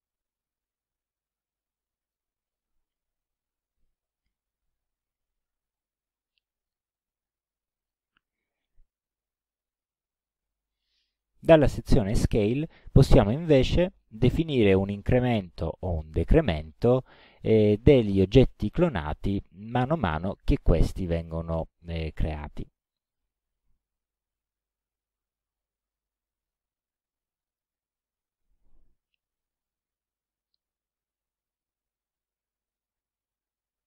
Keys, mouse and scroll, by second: 0.2-0.5 ctrl+scroll down 2, 1.1 ctrl+scroll up 2, 1.5-2.3 ctrl+middle drag, 7.8 click, 22.6 click, 24.4 KP_2, 24.5 KP_0, 24.9 Tab, 25.9 KP_2, 26.0 KP_0, 27.5 click.